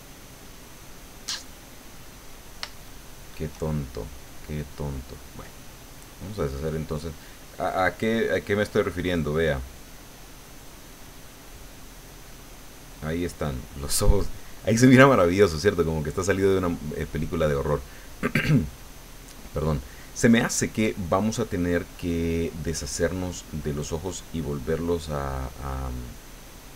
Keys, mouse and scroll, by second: 2.0 middle click, 2.8 shift+middle click, 4.3 middle click, 8.5 click, 8.9 click, 9.9 click, 23.1 click, 24.1 click, 26.3 click.